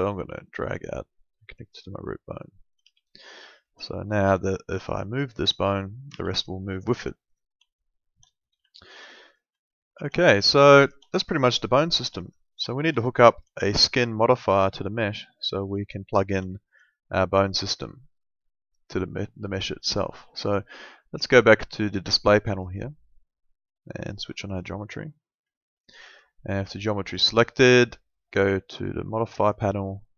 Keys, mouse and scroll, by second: 2.2 alt+middle click, 2.8 w, 3.1 click, 3.4 alt+middle click, 5.0 click, 6.1 ctrl+z, 6.5 alt+middle click, 7.7 alt+middle click, 8.7 alt+middle click, 9.3 click, 9.7 alt+middle click, 10.7 alt+middle click, 11.4 alt+middle click, 14.3 alt+middle click, 15.2 alt+middle click, 15.8 middle click, 16.5 alt+middle click, 22.5 click, 25.4 alt+middle click, 27.0 click.